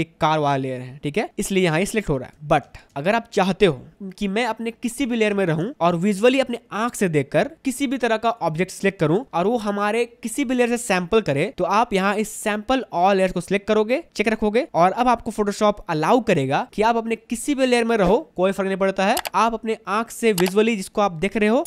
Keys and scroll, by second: 2.3 ctrl+d, 2.8 space, 5.5 space.